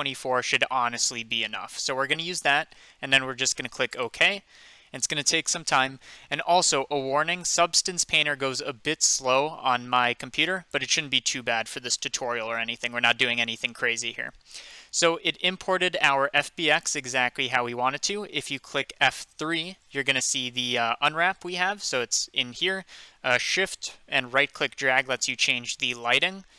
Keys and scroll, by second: 19.3 F3, 26.4 F2.